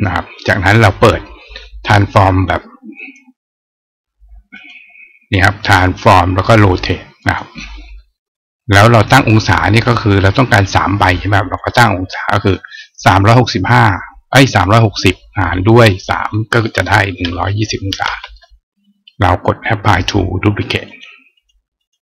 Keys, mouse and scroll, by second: 2.7 click, 4.4 click, 5.4 click, 7.0 click, 11.3 click, 20.6 click, 21.1 click, 21.6 click.